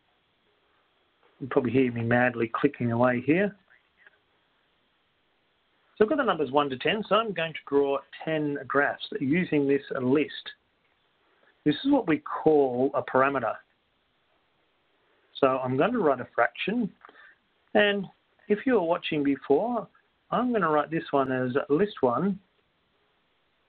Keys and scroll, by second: 0.6 Return, 1.1 7, 1.6 Return, 1.6 8, 3.3 Return, 3.3 9, 4.1 Return, 4.6 1, 5.1 0, 6.1 Return, 17.3 Return, 22.9 1.